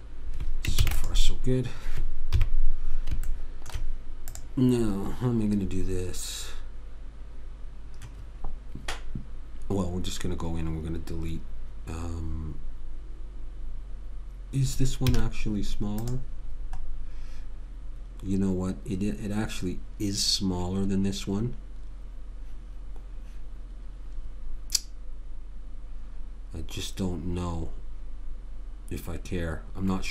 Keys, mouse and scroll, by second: 1.1 ctrl+s, 2.7 KP_3, 3.7 middle click, 4.4 middle click, 4.7 click, 4.7 right click, 15.4 z.